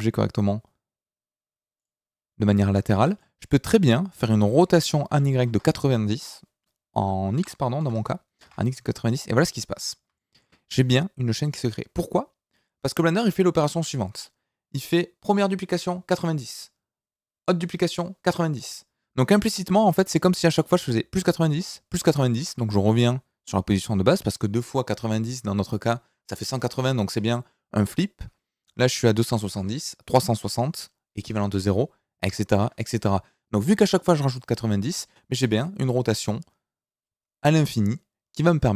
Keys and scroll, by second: 4.6 r, 5.1 y, 5.4 KP_9, 5.4 KP_0, 6.1 Escape, 7.3 r, 7.8 x, 7.9 KP_9, 7.9 KP_0, 8.4 KP_Enter.